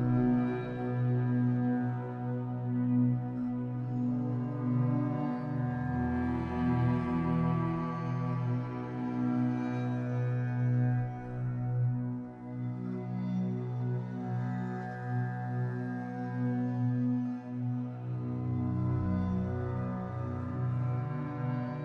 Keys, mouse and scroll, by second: 0.8-2.6 drag, 1.0-1.6 scroll up 2, 2.7-13.6 middle drag, 3.6 scroll up 2, 13.6-20.5 drag, 20.1-20.5 scroll down 2, 20.5-21.8 middle drag, 21.3-21.8 scroll up 2.